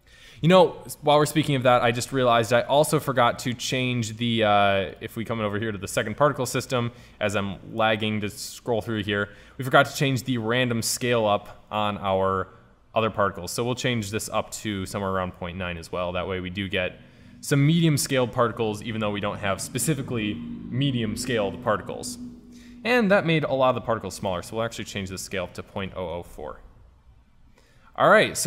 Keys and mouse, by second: 5.5-7.0 drag, 16.2 click, 17.1 click, 24.9-26.1 drag, 26.5 KP_0.